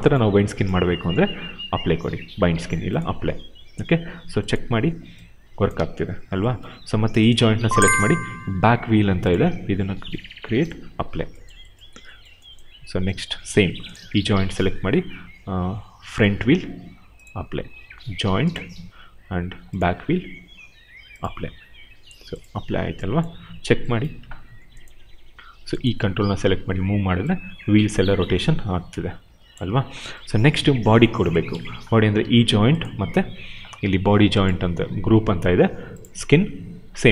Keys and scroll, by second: 4.6 e, 5.7 ctrl+z, 25.9 w, 29.6 ctrl+z, 32.1 q.